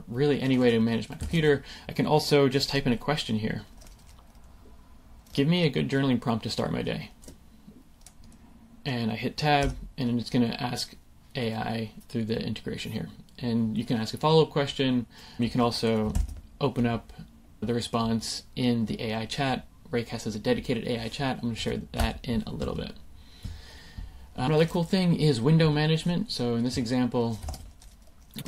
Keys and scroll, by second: 1.3 super+a, 1.5 BackSpace, 7.7 super+v, 9.6 Tab, 16.0 super+k, 21.5 Escape, 27.4 super+space.